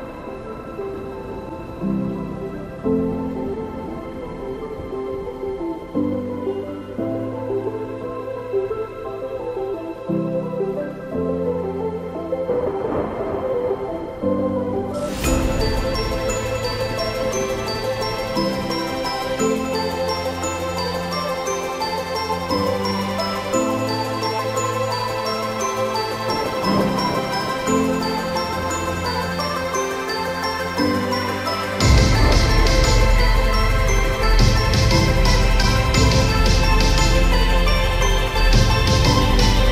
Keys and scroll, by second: 37.7 ctrl+0.